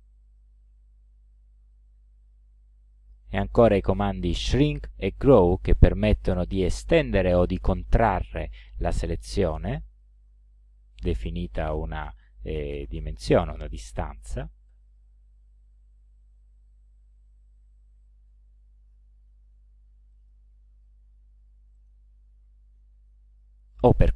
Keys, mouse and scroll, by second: 9.9 click, 14.7 click, 17.1 ctrl+z, 18.2 ctrl+z, 20.2-20.5 scroll up 2, 20.9 ctrl+z, 21.8 ctrl+scroll up 2.